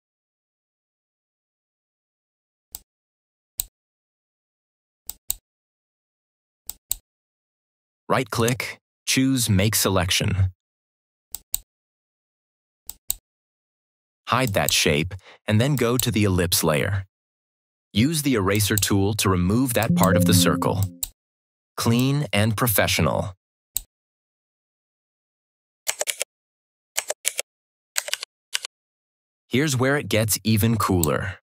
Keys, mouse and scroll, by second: 2.6-3.6 drag, 5.0 click, 8.3 right click, 11.2 click, 18.4-23.8 drag, 26.0-27.1 typing, 28.0 ctrl+-, 30.7 click.